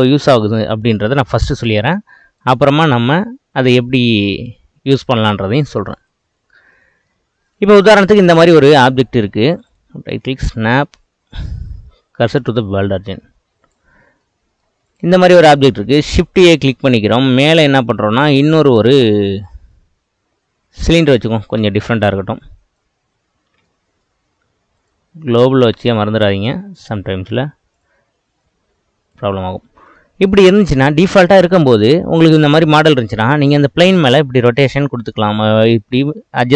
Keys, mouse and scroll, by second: 2.4-6.7 right drag, 6.7-7.5 middle drag, 7.5 click, 7.9-9.1 middle drag, 9.1 ctrl+z, 9.7-13.7 right drag, 13.7-14.2 drag, 14.2-14.9 middle drag, 14.9 click, 15.2-16.5 middle drag, 16.5 shift+a, 21.8-22.8 middle drag, 23.0 click, 24.8-27.0 drag, 27.0 s, 28.4 click, 29.5-30.8 middle drag, 30.8 scroll up 1, 31.3-33.6 shift+middle drag, 33.6 click.